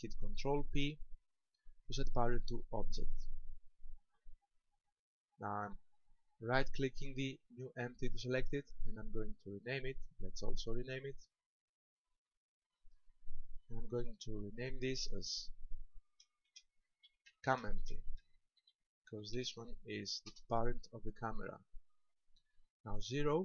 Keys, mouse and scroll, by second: 0.7 ctrl+p, 6.7 right click, 10.4 click, 12.0 click, 14.5 ctrl+click.